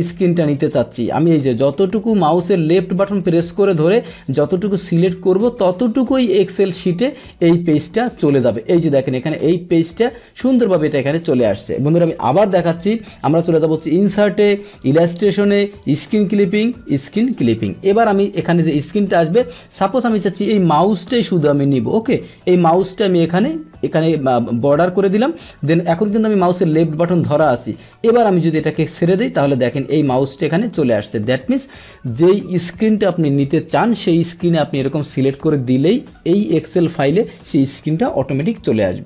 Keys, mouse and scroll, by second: 8.5 click, 10.2 click, 10.8 click, 12.0 Delete, 13.1 click, 14.7 click, 15.7 click, 17.2 click, 21.2-27.9 drag, 29.3-30.5 drag.